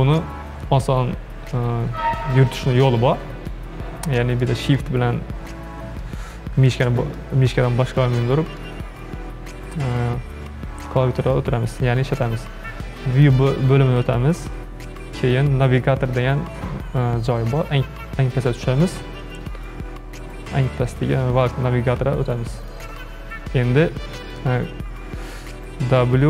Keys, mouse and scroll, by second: 3.5-10.7 shift+middle drag, 13.2-16.4 drag.